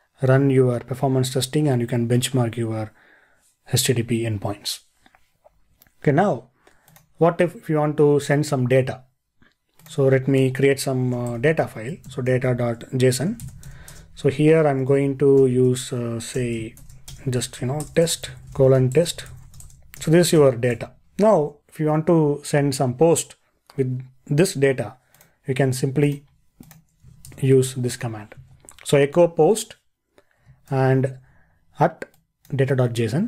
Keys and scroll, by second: 27.3 super+v, 30.7 ctrl+e.